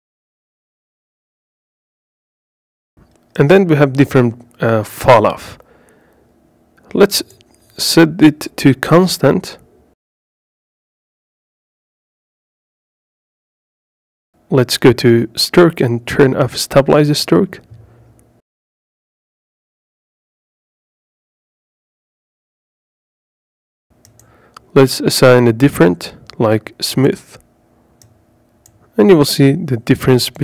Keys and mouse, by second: 2.7 ctrl+z, 4.6-11.2 drag, 14.4 ctrl+z, 15.5-17.1 drag, 18.5-20.1 drag, 24.6-27.0 drag, 27.7 click.